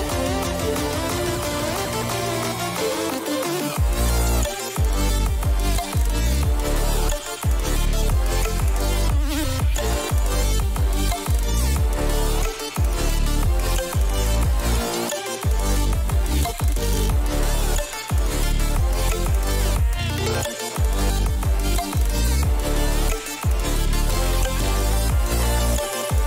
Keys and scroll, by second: 10.5-12.8 typing, 13.5 ctrl+=, 14.3 typing, 18.4 ctrl+alt+z, 18.8 ctrl+-, 19.0 ctrl+-, 19.8 ctrl+-, 20.0 [, 22.5 ctrl+-.